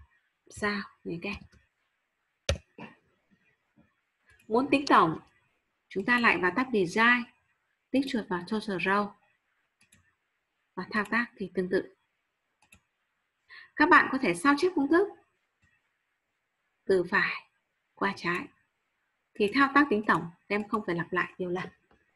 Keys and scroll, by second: 0.5 shift+8.